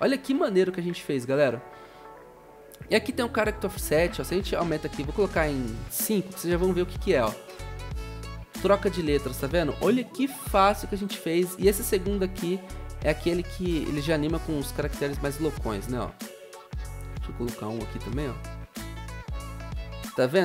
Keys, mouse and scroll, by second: 4.7 1, 5.7 ctrl+a, 6.2 5, 6.4 Return, 7.5 0, 10.2-10.7 typing, 13.7 Return, 16.5-17.2 typing, 17.7 Return, 19.5-20.4 typing.